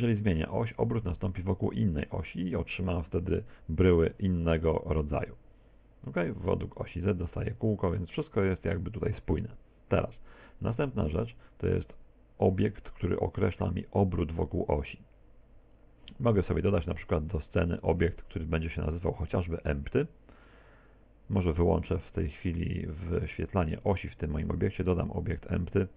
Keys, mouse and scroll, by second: 0.7 click, 5.1 click, 8.2 click, 16.7 shift+a, 18.1 Escape, 18.9 Tab, 19.3 shift+a, 22.2 click, 23.5 click, 24.3 shift+a.